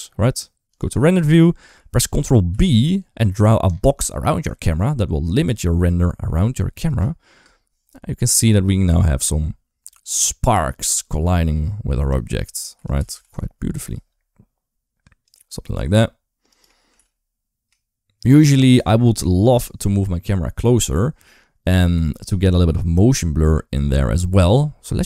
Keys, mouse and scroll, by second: 2.3 ctrl+b, 6.7 space, 7.3 space, 8.2-11.9 drag, 12.6 r, 15.5 g, 16.7 r, 19.2 ctrl+s, 22.9 middle click, 23.3 scroll down 1, 24.7 KP_0.